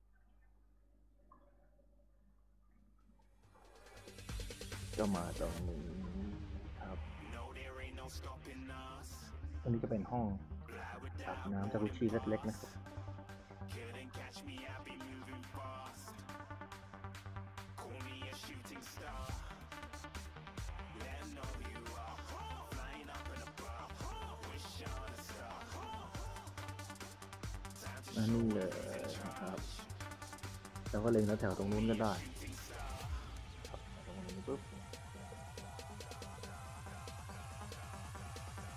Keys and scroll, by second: 0.0-0.7 typing, 7.8 a, 8.2 q, 8.9 d, 9.6 s, 11.8 s, 14.7 w, 18.0 e, 18.7 d, 20.7 w, 24.2-26.6 typing, 28.6 s, 30.3 a, 34.6-37.0 typing, 38.3 s.